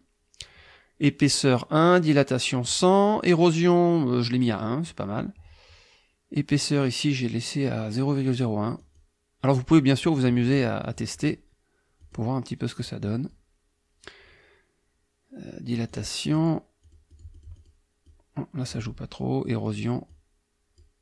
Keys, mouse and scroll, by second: 8.8 click, 9.6 click, 10.0 click, 10.4 click, 10.8 click, 12.0 click, 12.8 click, 15.9 click, 16.3 click, 16.8 click, 18.1 click, 19.6 click, 20.1 click.